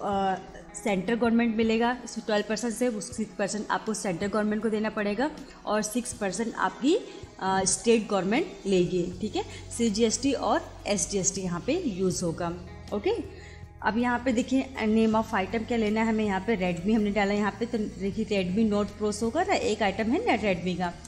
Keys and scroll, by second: 16.7 r, 20.9 Return.